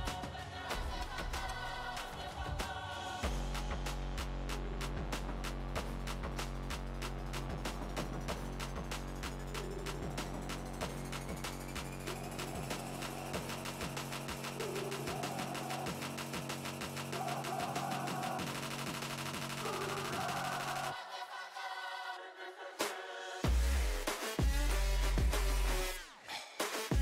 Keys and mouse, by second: 4.7 Tab, 5.3 Tab, 8.6-10.6 drag, 10.6-13.6 middle drag, 13.6 click, 14.5 Tab, 15.1 z, 16.9 Tab, 17.4 z, 17.9 a, 21.8 ctrl+r, 24.3 z, 25.7 ctrl+e.